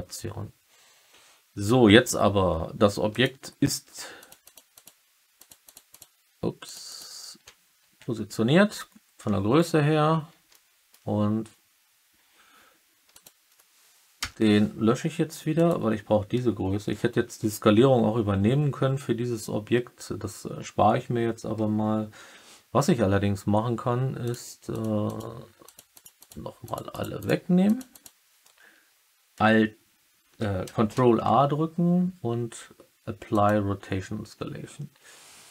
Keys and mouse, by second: 3.0 click, 4.1 click, 4.4 click, 4.7 click, 5.3 click, 5.6 click, 5.8 click, 6.6 click, 6.8 click, 10.4-10.9 alt+middle drag, 14.1 Delete, 15.6-17.1 drag, 24.2 click, 24.6 click, 25.0 click, 25.6 click, 25.9 click, 26.1 click, 26.6 click, 26.8 click, 27.1 click, 27.6 click, 27.8 click, 30.9 ctrl+a.